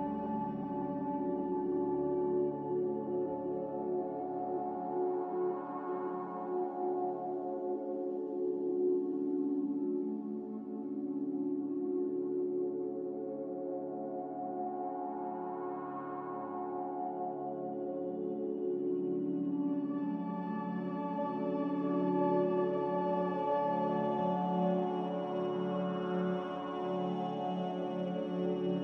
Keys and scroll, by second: 10.9 a, 15.0-16.2 typing, 15.3 Return, 18.9 typing, 19.4 Return, 24.7 z, 26.5 Escape, 27.5 c.